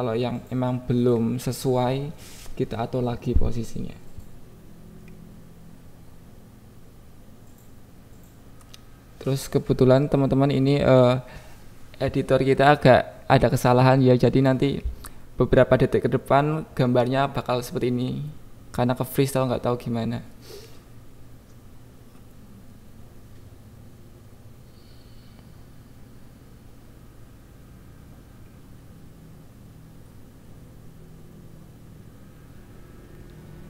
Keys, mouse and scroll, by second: 0.5 click, 0.7 KP_1.